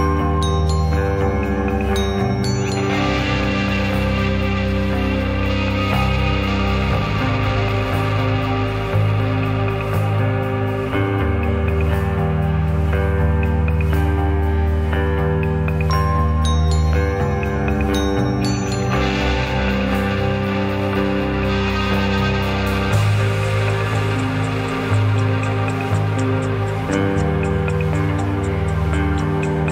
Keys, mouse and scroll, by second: 0.1 s, 2.1 click, 2.5 shift+click, 3.3 s, 5.0 click, 5.8 s, 7.7 click, 8.4 click, 8.8 click, 9.2 shift+click, 9.7 s, 10.6 click, 11.5 s, 13.1 click, 13.4 click, 14.2 shift+middle click, 14.5 click, 15.7 g, 17.3 click, 17.5 middle click, 18.2 right click, 18.8 middle click, 19.3 scroll up 1, 19.5 middle click, 19.9 click, 20.3 shift+click, 20.6 click, 20.8 shift+click, 21.3 click, 21.8 shift+click, 22.4 g, 23.8 middle click, 24.5 click, 25.1 click, 25.4 shift+click, 25.9 g, 26.8 click, 26.9-28.7 middle drag.